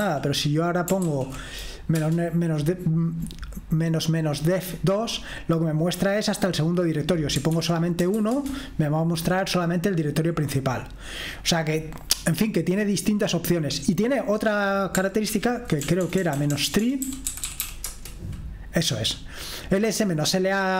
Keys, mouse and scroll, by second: 0.0-2.0 typing, 3.8-4.9 typing, 5.7-6.8 scroll up 1, 6.8-8.0 scroll down 1, 7.5 ctrl+p, 8.0 BackSpace, 8.1 1, 8.4 Return, 9.7-10.3 scroll up 1, 10.3-11.6 scroll down 1, 13.2-14.4 scroll down 1, 14.4 click, 15.3 ctrl+p, 15.8-18.0 typing.